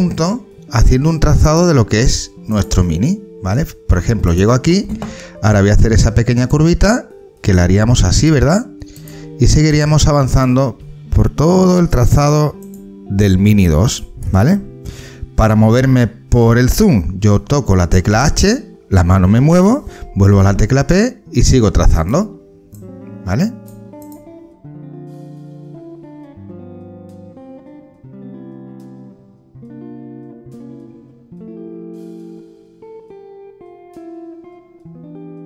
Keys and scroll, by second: 10.8 ctrl+z, 18.1 h, 20.3 p, 24.5-25.4 typing, 26.4 h, 28.1 h, 29.2 ctrl+z, 29.9 ctrl+z, 30.0-33.1 typing, 32.8 ctrl+z, 34.4-35.4 typing.